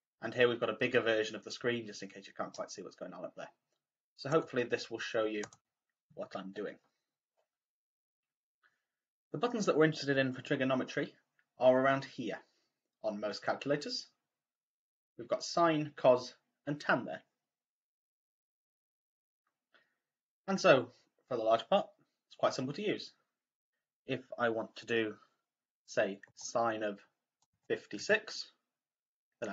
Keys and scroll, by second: 27.4 5, 27.9 6.